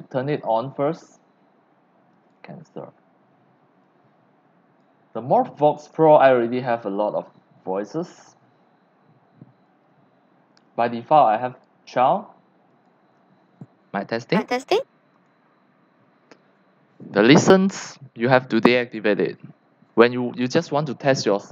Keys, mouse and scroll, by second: 2.1 click, 3.8-4.8 drag, 5.6-5.9 drag, 6.9-7.9 drag, 9.7 click, 10.3 click, 11.5 click, 12.7 click, 15.1 click.